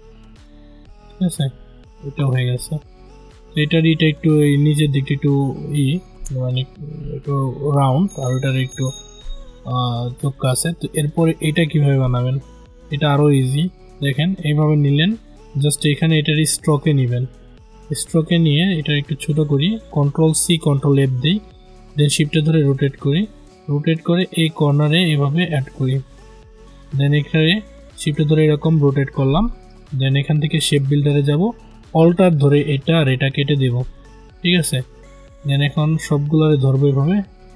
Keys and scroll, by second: 20.3 ctrl+c, 20.6 ctrl+f.